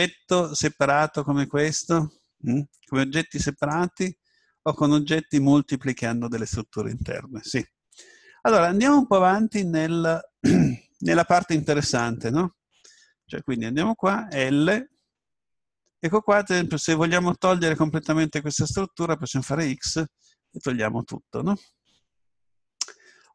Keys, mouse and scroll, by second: 3.6-6.6 right drag, 8.1-8.7 scroll up 1, 8.7-10.6 middle drag, 11.9 right click, 13.0 Tab, 14.9 l, 19.4 x, 22.0-23.3 middle drag.